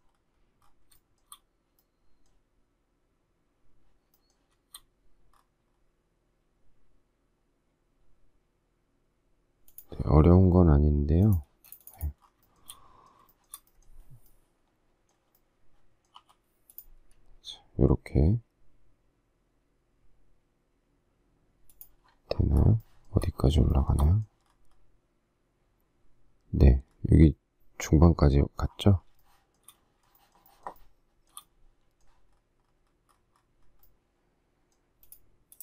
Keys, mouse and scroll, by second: 1.0 shift+middle click, 11.6 space, 12.5 shift+middle click, 13.4 shift+middle click, 16.2 p, 16.9 click, 22.8 shift+middle click, 23.8 shift+middle click, 23.9 shift+middle click, 29.2 shift+middle click, 30.1 shift+middle click, 30.3 shift+middle click, 30.4 shift+middle click.